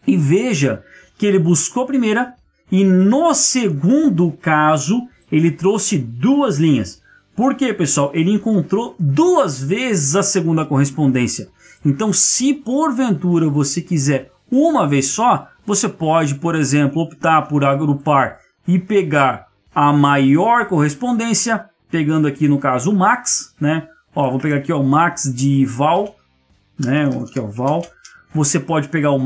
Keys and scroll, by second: 28.2 Tab.